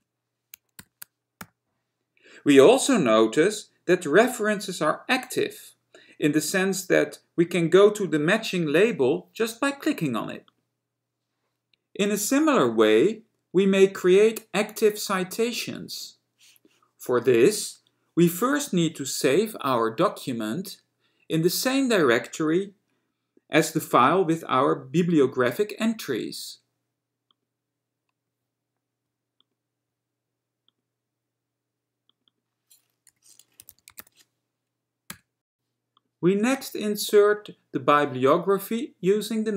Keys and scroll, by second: 0.0 Return, 0.9 ), 36.6 Return.